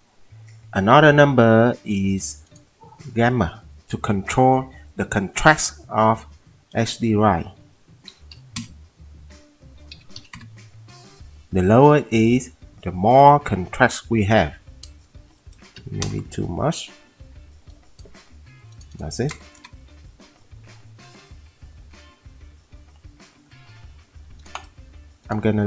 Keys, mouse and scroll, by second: 8.3-8.8 typing, 8.5 click, 9.9 click, 9.9-10.4 typing, 13.5 typing, 15.7-16.3 typing, 18.4 typing, 19.5-20.9 typing.